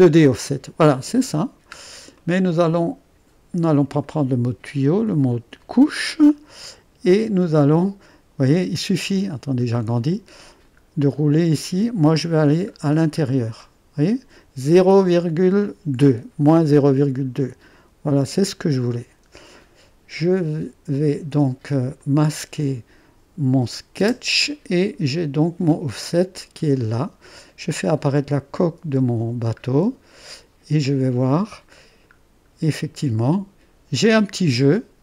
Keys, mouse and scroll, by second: 1.1-1.8 scroll up 1, 1.8-2.2 scroll down 1, 2.2 click, 2.4-4.0 right drag, 4.0-7.1 drag, 7.1-7.6 scroll down 1, 7.6-8.1 scroll up 1, 9.2-9.8 scroll up 2, 9.8 click, 11.1-14.0 scroll down 4, 18.8-20.7 drag, 20.9-23.9 drag, 23.9 space, 28.3-29.6 drag, 28.9 space, 30.3 click, 31.3 click, 32.1-32.7 scroll up 1.